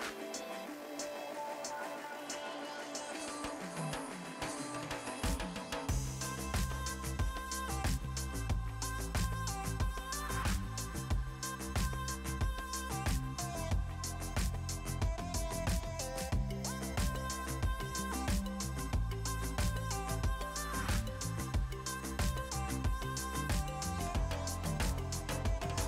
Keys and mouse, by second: 3.8 shift+click, 4.5 x, 4.7 Return, 6.0 right click, 6.3 click, 6.7 Pause, 7.0 click, 11.6 right click, 11.9 click, 13.3 click, 13.6 click, 13.8 click, 14.4 click, 15.2 ctrl+x, 15.3 click, 16.9 KP_1, 17.3 Return, 17.7 click, 18.5 Delete, 18.8 click, 24.0 right click, 24.2 click.